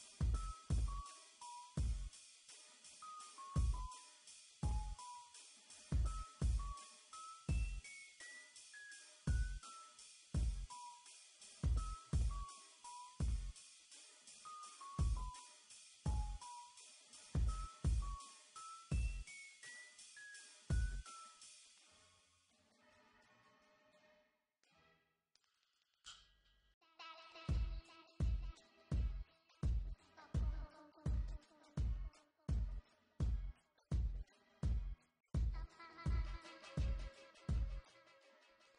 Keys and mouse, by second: 0.0-0.8 typing, 4.6 b, 5.5 Tab, 6.0 Tab, 6.4 e, 6.8 Tab, 7.3 Tab, 7.7 Tab, 8.2 Tab, 8.2 Delete, 8.4 Tab, 9.0 KP_1, 9.4 KP_7, 9.8 z, 11.3 click, 11.8 z, 12.9 KP_5, 14.3 shift+d, 14.6 KP_3, 15.4 r, 16.7 KP_5, 17.1 z, 19.5 z, 19.6 Tab, 19.8 Tab, 23.1 Tab, 23.6 z, 23.8 z, 24.4 ctrl+r, 26.0 f, 26.3 Tab, 26.4 Tab, 26.7 ctrl+r, 27.5 click, 28.5 f, 28.6 Tab, 31.7 KP_1, 32.7 shift+a, 34.8 s, 35.1 KP_1, 35.3 s, 35.8 r, 38.0 s.